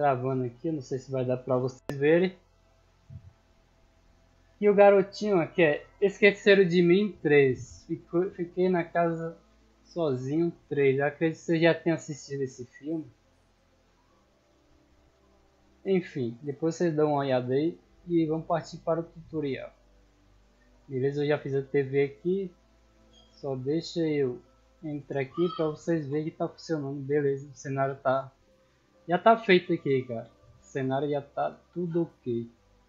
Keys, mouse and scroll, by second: 6.6 click, 21.1-21.5 middle drag, 28.6 w, 28.9 d.